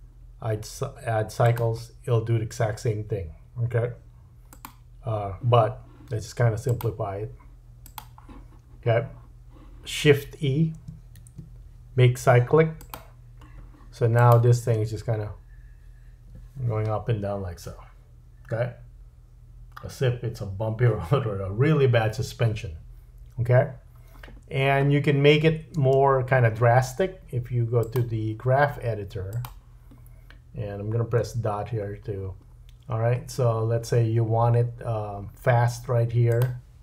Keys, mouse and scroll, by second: 4.5 click, 6.7 click, 11.2 shift+e, 14.2 click, 14.7 space, 25.8 space, 27.8 click, 31.2 KP_Decimal, 32.4-34.2 scroll down 4, 36.4-36.8 drag.